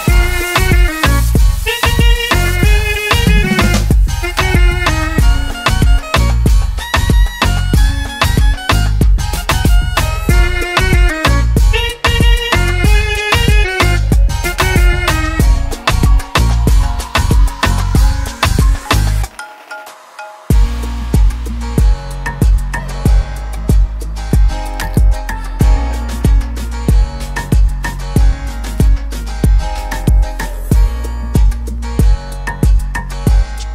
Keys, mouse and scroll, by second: 0.0-0.2 typing, 0.9 Return, 2.4 click, 7.7 click, 8.5 typing, 9.0 Return, 10.6 Return, 10.7 click, 11.8 double click, 12.4 click, 19.1 click, 22.1 ctrl+a, 25.1 click, 27.8 click, 32.7 right click.